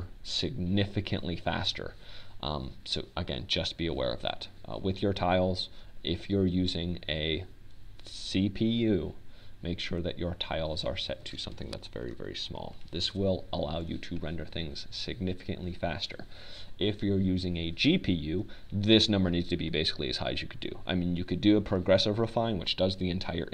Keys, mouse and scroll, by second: 14.1-15.8 drag.